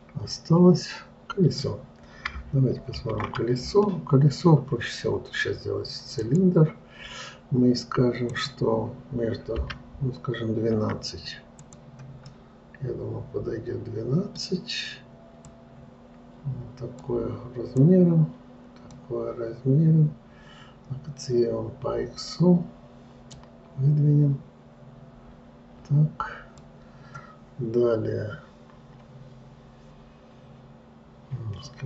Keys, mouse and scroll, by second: 3.4 shift+a, 8.7-11.9 drag, 12.7-15.7 middle drag, 15.9-21.3 drag, 23.8-26.8 drag.